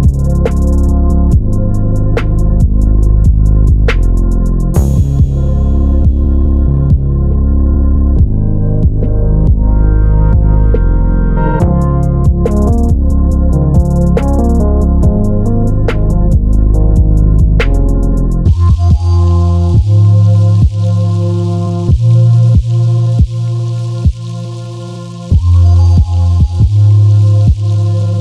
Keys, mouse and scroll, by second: 1.0 click, 1.8 g, 3.1 click, 4.2 s, 5.2 click, 5.4 g, 7.2 click, 8.5 click, 10.0 shift+d, 12.8 click, 13.4 Delete, 13.7 click, 14.0 Delete, 14.2 click, 14.4 Delete, 14.9 click, 15.8 shift+click, 17.5 shift+d, 19.5 click, 21.4 s, 22.7 click, 23.0 g, 24.9 click, 25.5 Delete, 25.9 click, 26.5 shift+click, 27.4 shift+click, 27.7 shift+click.